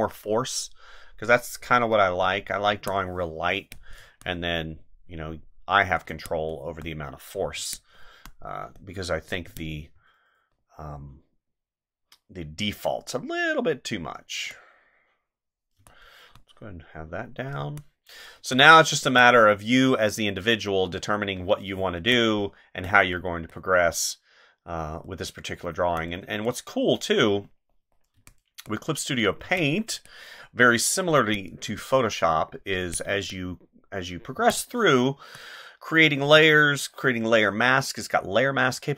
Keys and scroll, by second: 2.7 space, 6.0 space, 7.5 space, 9.4 space, 15.8 space, 17.6 space, 21.8 space, 28.1 space, 29.4 space, 31.2 space, 32.8 space, 34.3 space.